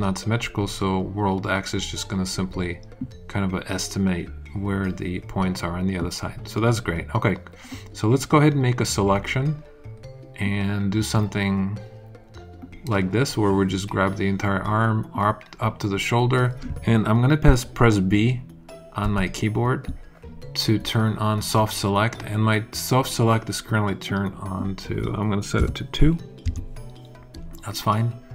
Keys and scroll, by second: 19.0 b, 25.5 2, 26.4 Return.